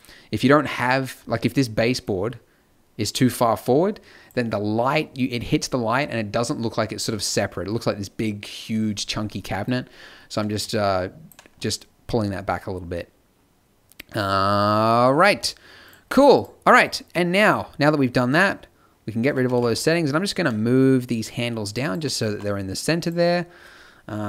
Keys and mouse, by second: 15.2 t, 16.1-19.4 drag, 19.4 g, 22.2 a, 23.0-24.2 drag.